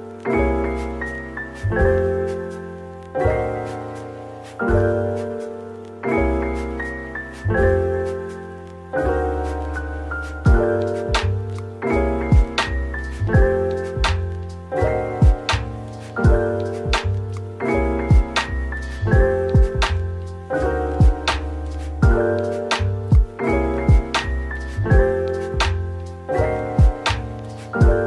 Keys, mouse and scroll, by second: 0.7-1.4 typing, 3.2 typing, 4.9-6.9 typing, 7.7 middle click, 8.4-9.3 typing, 11.6 typing.